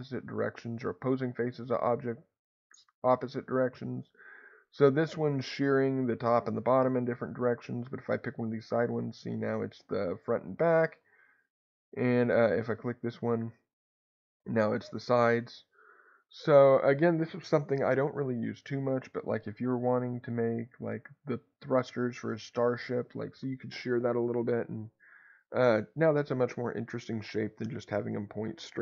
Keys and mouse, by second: 6.8 Escape, 8.3-10.6 drag, 10.6 Escape, 12.8-16.5 drag, 16.2 Escape, 20.2-22.8 drag.